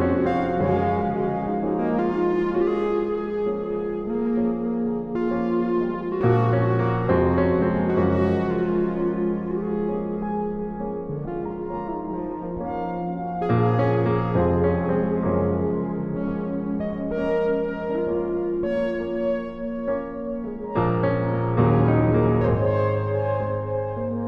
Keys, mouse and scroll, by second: 4.6-7.4 right drag, 5.5 f, 7.4 a, 7.8 c, 14.4-17.3 drag, 15.1 g, 17.3 f, 19.4-20.8 drag, 20.8-22.0 middle drag, 22.0 a, 22.3 a, 22.3 BackSpace, 23.3 a.